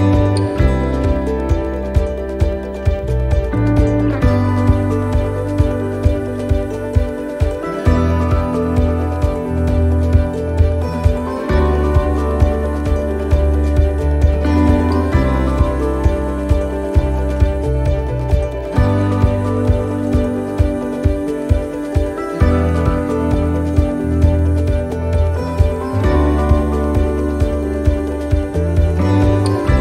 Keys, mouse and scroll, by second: 13.1 click, 20.3 click, 22.0 right click, 23.4 click, 25.2 right click, 26.1 l, 27.6 click.